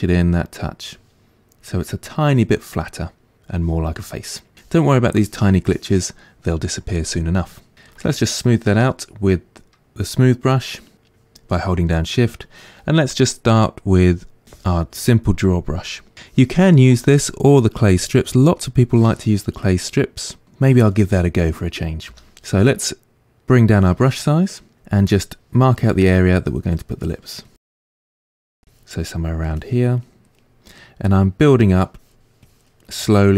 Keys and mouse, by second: 8.1-27.6 shift+drag, 22.2 f, 27.6 ctrl+middle click, 28.3 click, 28.5 middle click, 28.7 click, 29.0 middle click, 29.6 click, 30.0 middle click, 30.2 click, 30.4-32.0 middle drag, 32.0 click, 32.9-33.3 middle drag.